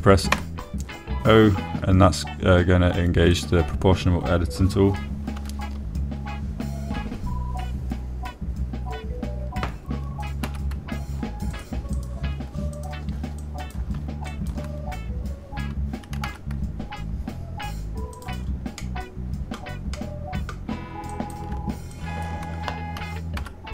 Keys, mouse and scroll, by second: 0.4 click, 1.7 o, 6.7 s, 11.8 x, 13.3 click, 14.8 click, 15.7 shift+click, 17.5 s, 17.6 x, 19.5 click, 20.3 middle click, 21.3 middle click, 22.5 click, 23.4 shift+click.